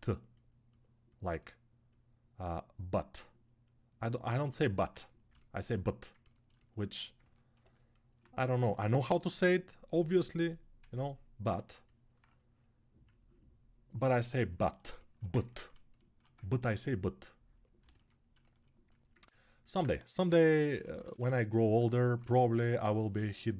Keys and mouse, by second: 6.5-18.9 alt+drag, 18.9-21.7 ctrl+alt+right drag, 19.9 g, 20.5 [, 20.6 [, 22.0 1.